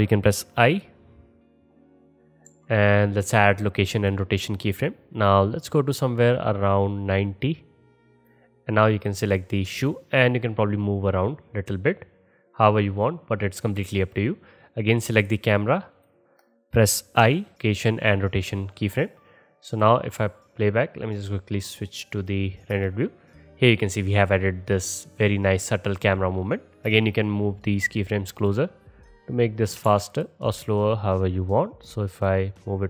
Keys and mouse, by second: 0.7 middle click, 0.7 right click, 2.5 i, 5.3-9.2 drag, 15.2 click, 16.0 click, 17.2 i, 18.9-19.8 drag, 18.9-19.8 middle drag, 18.9-19.8 right drag, 22.8 space, 26.9 space, 28.5-30.3 middle drag, 30.0 ctrl+z, 30.6 middle click, 31.4 middle click.